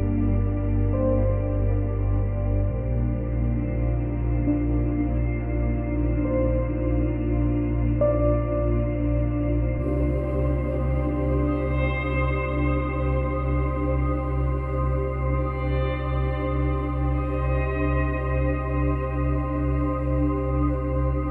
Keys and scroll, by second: 0.6 space, 2.3 space, 3.7 space, 21.0 space.